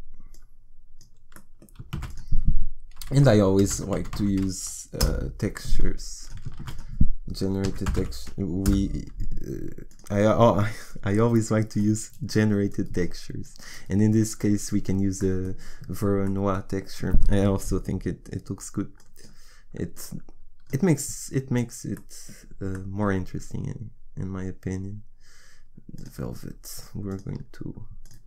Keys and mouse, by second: 1.9 shift+a, 6.6 shift+a, 12.7-14.4 drag, 19.0-20.7 drag.